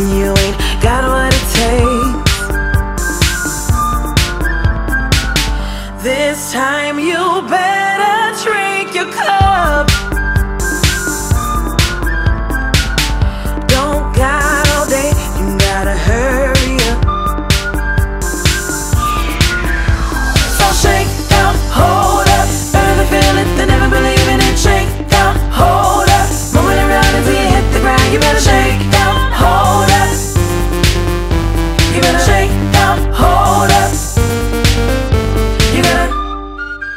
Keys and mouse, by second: 1.3 click, 2.0 Down, 3.0 click, 4.8 click, 5.8 click, 5.9 click, 7.2 click, 9.4 click, 9.8 double click, 10.4 click, 11.5 click, 13.3 click, 15.3 click, 15.3 click, 17.1 click, 20.9 click, 24.0 click, 25.0 click, 27.6 click, 28.6 click, 30.6 click, 30.7 click, 32.7 click, 34.8 click, 36.4 click.